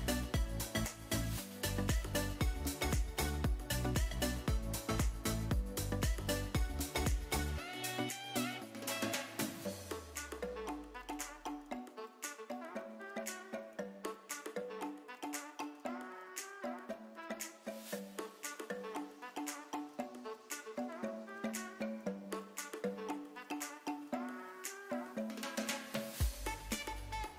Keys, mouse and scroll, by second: 3.0 click, 4.4 click, 7.4 ctrl+click, 9.5-14.9 drag, 17.7-19.4 middle drag, 19.6 click, 20.9 click, 22.8 click, 24.3 l, 25.2 middle click, 26.7 x.